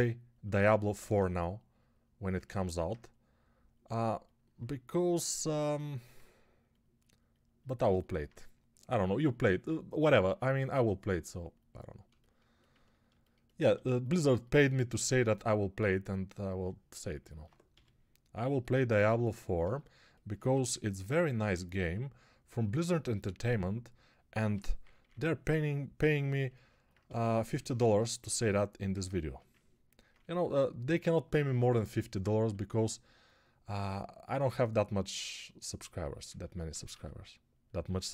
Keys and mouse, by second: 13.6 1, 17.6 g, 20.3 1, 24.3 g, 24.7 [, 24.8 [, 25.0 [, 28.1 1, 30.0 1, 32.4 1, 36.8 x.